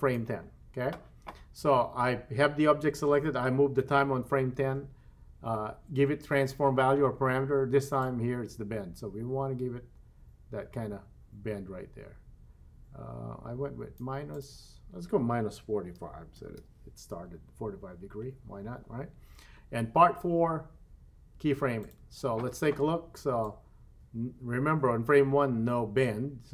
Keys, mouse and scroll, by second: 8.0-14.0 drag, 14.3-17.5 drag, 21.8 click, 23.5-26.5 drag.